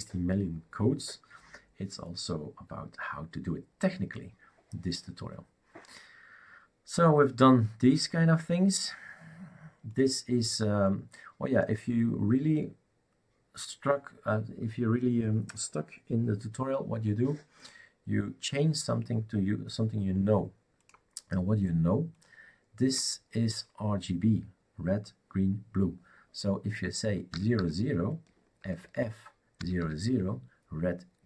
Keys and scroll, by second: 27.3 0, 29.6 typing.